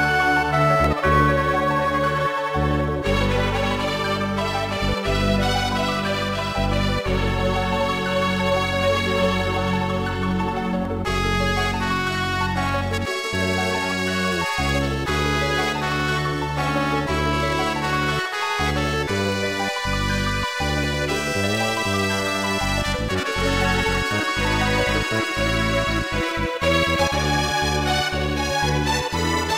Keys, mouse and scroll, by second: 0.0-6.2 typing, 7.6 middle click, 8.5 scroll up 1, 11.9-12.5 typing, 13.1 Return, 15.2 click, 16.5 w, 17.9 click, 20.7 scroll up 1, 21.7 scroll up 1, 24.3 click, 24.6 ctrl+z.